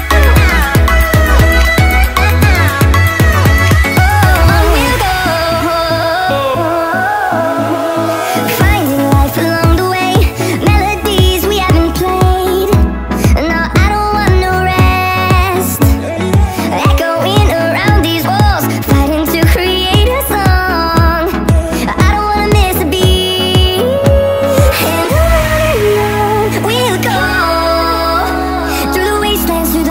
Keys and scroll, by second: 4.8 ctrl+i, 17.0 [, 17.1 [, 17.1 [, 22.8-25.3 typing, 28.1 space.